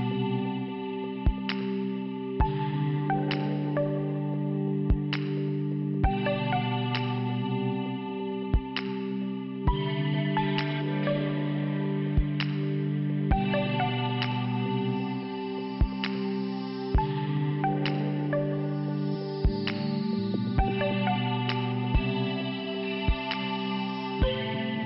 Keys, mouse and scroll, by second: 1.9 shift+Return, 2.7 click, 3.9 click, 5.7 click, 5.8 click, 6.8 click, 11.6 click, 13.5 shift+Return, 14.4 click, 16.5 click, 19.5 click, 21.3 click, 23.2 shift+Return, 23.8 click.